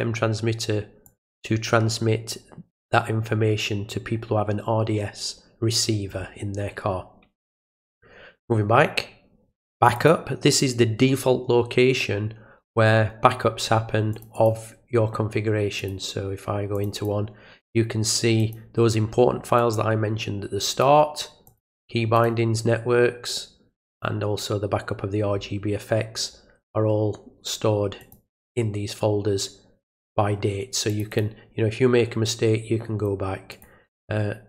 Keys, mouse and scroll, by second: 1.1 click, 7.9 click, 9.8 click, 10.0 click, 14.1 click, 14.4 click, 15.8 click, 16.8 click, 17.0 click, 18.4 click, 19.6 click, 20.7 click, 21.5 click, 22.2 click, 23.9 click, 28.0 click, 30.9 click, 31.1 click, 33.5 click.